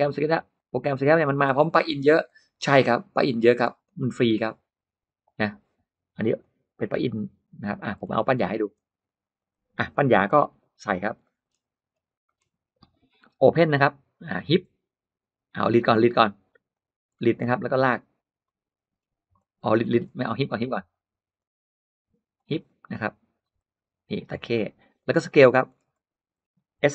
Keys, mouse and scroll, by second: 0.4 click, 0.8 space, 0.9 middle click, 1.6 middle click, 2.1 click, 3.4 click, 6.2 click, 7.4 click, 7.9 middle click, 8.2 scroll down 1, 8.6-8.9 scroll up 1, 8.9 click, 9.1 click, 9.2 click, 9.3 click, 9.8 middle click, 10.2 g, 10.7 click, 11.1 middle click, 11.5-11.9 scroll up 1, 12.0 middle click, 12.2 scroll down 1, 15.6 click, 16.6 click, 16.9-17.3 scroll up 1, 17.0 middle click, 18.3 click, 18.7 scroll up 1, 18.9 middle click, 19.7 middle click, 19.9 Escape, 20.6 click, 21.2 click, 22.2 click, 23.4 click, 24.2 space, 24.4 middle click, 24.4-24.7 scroll up 1, 24.8 click, 25.1 middle click, 25.5-26.4 scroll up 2, 26.7 s.